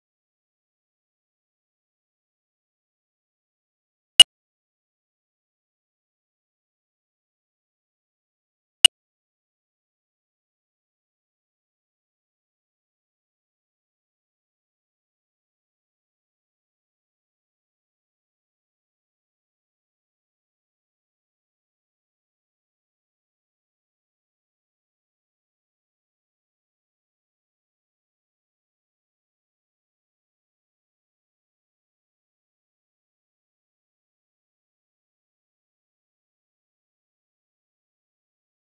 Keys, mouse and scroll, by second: 0.0 middle click, 0.1 ctrl+z, 0.2 middle drag, 0.4 click, 0.6 middle drag, 0.8 ctrl+click, 1.2 middle click, 1.3 x, 1.5 middle click, 1.7 Tab, 1.8 middle click, 2.0 s, 2.2 right click, 2.5 middle click, 2.7 s, 3.0 middle click, 3.1 s, 3.7 scroll up 2, 4.0 click, 4.3 middle drag, 4.4 scroll up 1, 4.7 click, 5.5 shift+a, 6.3-8.3 drag, 8.3 Tab, 8.5 a, 8.7 u, 9.1 u, 10.5 middle click, 10.9-16.4 typing, 11.5 scroll down 3, 16.3 Tab, 17.1 Tab, 17.4 g, 18.4 s, 19.1 middle click, 19.2-19.6 scroll down 9, 19.6 s, 20.2 scroll down 1, 20.3 s, 21.5 KP_0, 21.8 middle click, 22.0 KP_0, 22.3 g, 24.2 Tab, 24.3 middle click, 24.4 scroll down 10, 24.6 middle click, 24.9 g, 25.3 KP_0, 25.6 s, 26.7-28.5 typing, 27.4 Escape, 30.4 g, 31.0 Tab, 31.3 g, 33.2 Tab, 33.7 middle click, 33.7-34.0 scroll down 11, 34.0 click, 34.7 KP_0, 35.1 middle click, 35.2 KP_0, 35.9 click, 36.3 z, 37.3 F7, 37.7 middle click, 37.8 scroll up 3, 37.9 scroll down 3, 38.1 scroll up 1, 38.3 click, 38.5 KP_Decimal.